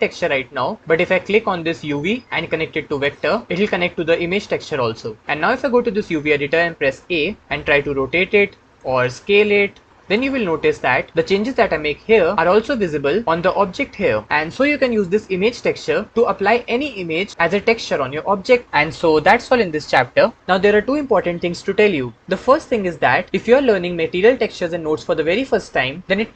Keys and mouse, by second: 2.0 click, 6.9 a, 7.8 r, 9.4 s, 10.0 click, 17.3-26.3 middle drag.